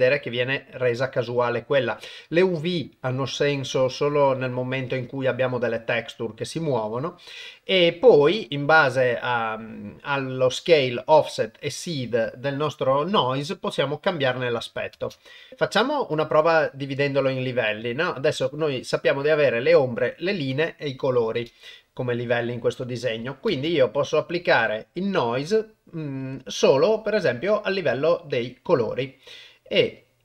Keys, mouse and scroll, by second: 0.7-1.3 drag, 2.2-3.0 drag, 3.9-4.5 drag, 14.9 shift+space, 15.5 shift+Left, 23.5 shift+space, 24.6 click, 26.2-28.8 drag, 30.0-30.2 drag.